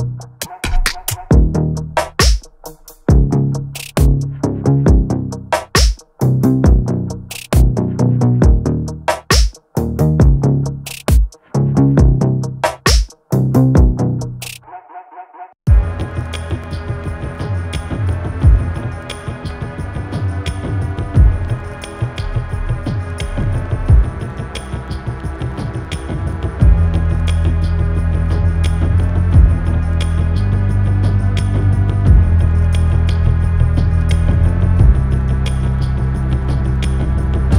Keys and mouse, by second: 1.5 click, 3.8-5.6 drag, 7.2 click, 10.4-11.7 drag, 14.0-14.8 middle drag, 15.4 click, 18.2 click, 23.4 click, 24.8 click, 26.1-27.9 drag, 29.2 click, 29.9 click, 31.7 click, 32.5-34.9 middle drag.